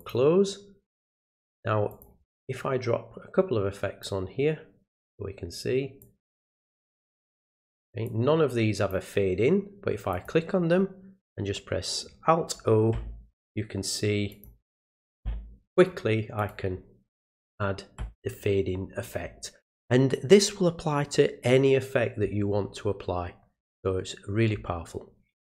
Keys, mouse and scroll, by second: 0.0 click, 1.9 click, 4.0 click, 6.0 click, 8.1 click, 10.1 click, 14.3 click, 16.4 click.